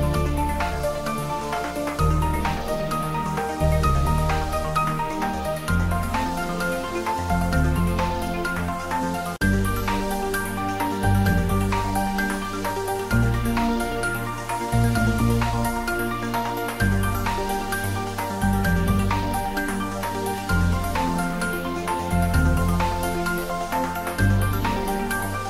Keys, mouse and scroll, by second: 0.1 click, 0.2-1.1 typing, 1.8 click, 2.1 g, 3.7 z, 4.1 click, 4.3 Tab, 5.0 middle click, 6.1 Tab, 7.2 click, 8.3 middle click, 9.1 click, 10.2 e, 11.9 click, 12.2-15.9 typing, 13.7 click, 14.7 click, 16.4-17.7 scroll down 1, 18.8 click, 19.9 middle click, 20.9 click, 21.4-22.9 middle drag, 22.9 shift+click, 23.2 middle click, 23.8-25.2 typing, 25.4 click.